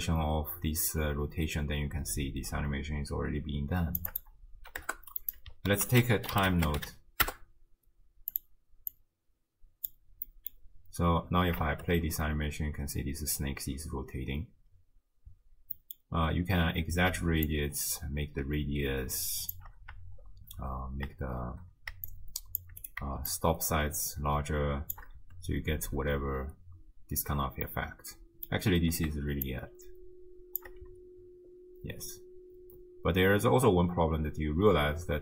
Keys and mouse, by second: 4.1 click, 5.2 click, 5.7 ctrl+a, 9.0-9.9 drag, 10.3 middle click, 11.7 shift+space, 15.3 space, 15.8 middle click, 17.5-19.6 shift+drag, 22.1 shift+click, 23.3-24.9 shift+drag, 25.2 space, 27.7 click, 28.8 space, 29.5-30.6 shift+drag, 30.9 space.